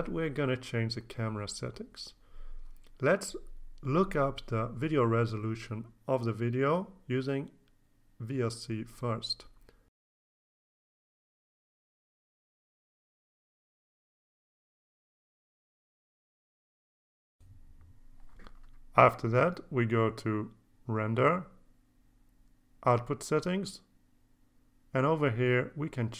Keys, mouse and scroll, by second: 5.8 alt+Tab, 7.9 right click, 9.0 click, 11.5 click, 12.7 click, 14.2 click, 17.6 click, 19.2 click, 21.1 click, 23.5 click, 25.2 click, 26.1 KP_6, 26.1 KP_4.